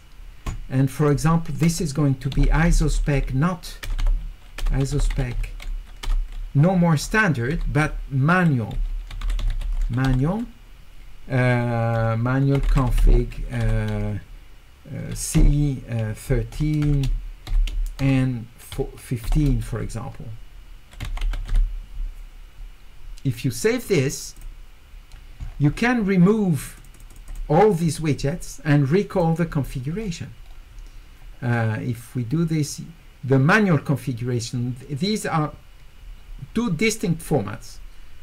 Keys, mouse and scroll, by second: 1.0 click, 2.5 s, 2.7 s, 4.0 e, 4.9 e, 9.1 u, 9.5 u, 12.7 e, 21.3 u, 24.4 click, 25.5 scroll up 4, 26.6 click, 26.8 click, 26.9 click, 27.1 click, 27.3 click, 29.1 click, 30.0 middle click, 30.0-30.7 scroll up 2.